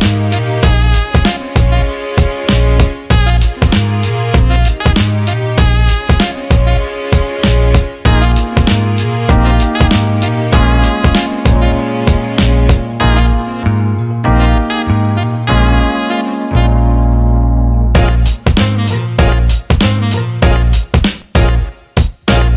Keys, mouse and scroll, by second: 0.0 alt+middle click, 0.9 alt+middle click, 2.4 alt+shift+middle click, 3.2 click, 4.4 click, 5.1 Tab, 5.7 alt+middle click, 6.1 alt+shift+middle click, 6.5 right click, 6.5 click, 6.8 click, 7.3 click, 9.8 click, 13.2-14.3 drag, 14.7 alt+shift+middle click, 15.6 Tab, 16.1 click, 16.8 Tab, 17.6 alt+middle click, 18.7 click, 18.8 click, 20.7-22.5 drag.